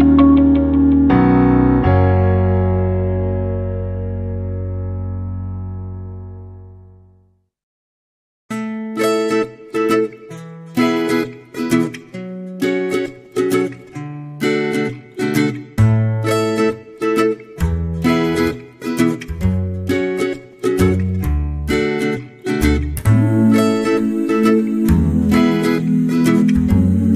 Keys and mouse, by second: 0.1 ctrl+r, 1.9 k, 4.9 shift+middle click, 5.2 middle click, 6.4 shift+middle click, 6.7 middle click, 7.4 right click, 8.1-9.1 shift+right drag, 9.1 middle click, 10.0 middle click, 11.0 e, 12.6-13.2 middle drag, 13.6-14.1 middle drag, 15.1 shift+right click, 15.8 m, 16.7 middle click, 17.7 alt+z, 18.1 right click, 18.6 shift+right click, 19.4 m, 20.6 alt+z, 21.4 middle click, 22.0 g, 23.0 alt+right click, 23.6 KP_3, 24.4 alt+z, 24.9 shift+middle click, 25.7 e, 26.9 alt+z.